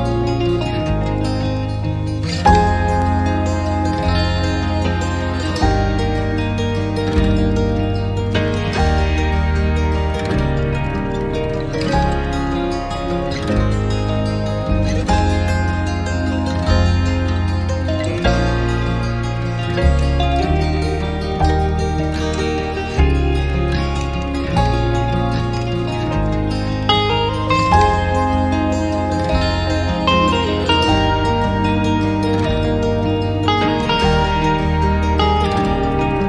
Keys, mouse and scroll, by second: 3.3 scroll up 1, 3.7-4.1 scroll down 1, 4.1-4.4 scroll up 1, 5.2 scroll down 1, 7.2 right click, 11.3 right click, 12.0 alt+middle click, 13.4 alt+click, 14.3 alt+click, 14.4 scroll up 1, 14.7 alt+middle click, 16.9 right click, 19.5 double click, 19.7-20.1 typing, 20.2 Return, 30.6 alt+middle click, 31.4 alt+middle click, 31.7 alt+click, 32.5-32.9 scroll up 1, 33.0 alt+middle click, 33.3 scroll up 1, 33.5 scroll down 1, 33.7 alt+click, 34.7 alt+middle click.